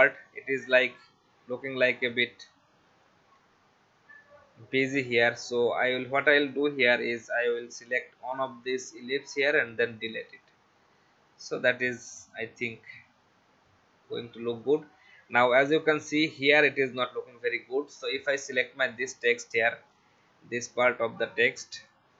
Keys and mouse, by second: 1.8 click, 4.8 click, 6.5 click, 9.5 Delete, 12.0 click, 14.6 click, 18.2 click.